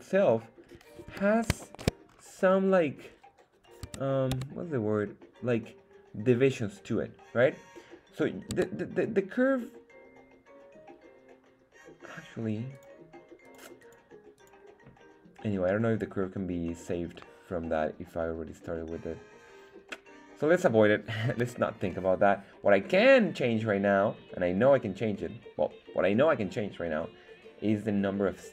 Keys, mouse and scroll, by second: 0.2 scroll up 2, 1.1 KP_1, 1.6 shift+middle click, 2.0-2.4 scroll up 2, 3.3-3.9 scroll up 1, 3.9 Tab, 4.3 Tab, 5.0-5.3 scroll down 2, 8.5 Tab, 12.7 click, 13.4 click, 13.8 click, 14.3 click, 16.6-20.7 middle drag, 21.3 KP_1.